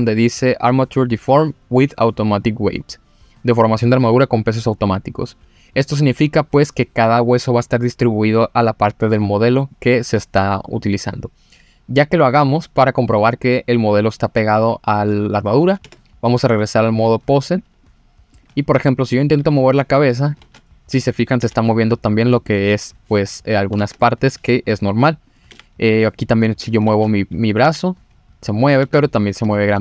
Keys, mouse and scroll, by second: 12.0-12.3 scroll up 1, 12.3-12.8 scroll down 1, 12.8 click, 13.1-13.5 middle drag, 13.8-14.2 scroll up 2, 14.2-15.1 middle drag, 15.5 scroll down 1, 15.8 Tab, 17.0-17.8 drag, 18.3 click, 19.0 click, 19.4 g, 20.2 click, 20.4 ctrl+z, 20.6-21.0 middle drag, 21.4 g, 23.6 click, 23.8 ctrl+z, 24.0-24.5 middle drag, 25.2 click, 25.5 g, 26.5 click, 26.9 ctrl+z, 27.6 g, 28.7 click, 28.8 ctrl+z, 29.5-29.8 middle drag.